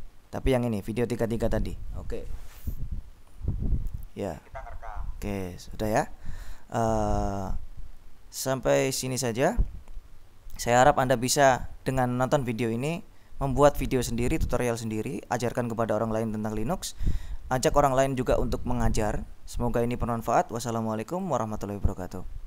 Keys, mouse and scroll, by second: 1.2 click, 3.6 click, 5.7 click, 10.8-12.6 drag, 21.2 click.